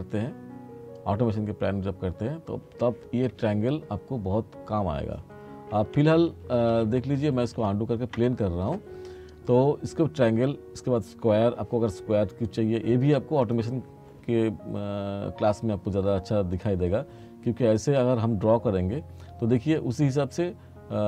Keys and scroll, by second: 6.1 ctrl+z.